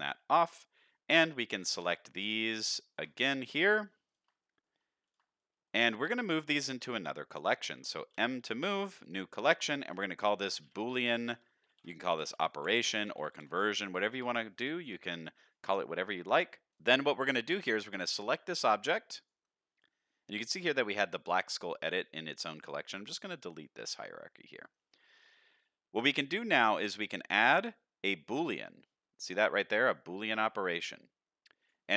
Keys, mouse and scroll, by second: 0.0 click, 1.4 click, 1.8-2.4 middle drag, 2.8 shift+click, 3.2-3.7 middle drag, 4.0 shift+click, 4.4 middle drag, 5.0 shift+click, 5.3-5.7 middle drag, 6.1 shift+click, 6.5-6.8 middle drag, 7.3 shift+click, 8.1 m, 10.6 o, 15.9-16.2 middle drag, 16.7 drag, 16.8 middle click, 18.1-19.3 drag, 20.6 click, 22.5-24.7 right drag, 25.0 middle click, 26.2 click, 26.6-28.4 drag, 30.8 click.